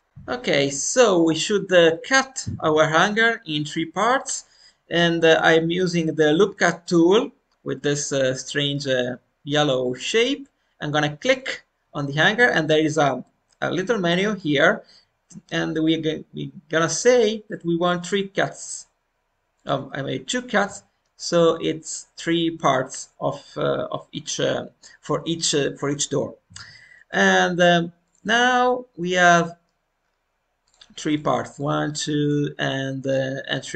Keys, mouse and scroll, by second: 8.3-28.0 middle drag, 28.0-33.7 drag.